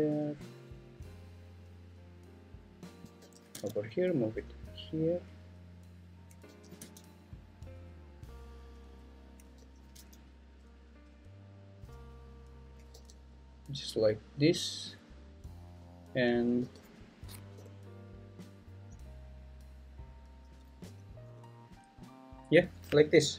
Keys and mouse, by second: 3.2 g, 3.5 x, 5.4 click, 6.5 g, 6.8 x, 8.5 click, 9.6 g, 10.2 x, 12.0 click, 13.0 g, 14.6 click, 16.6 g, 17.5 y, 19.4 click, 20.8 g, 21.3 y, 22.5 click.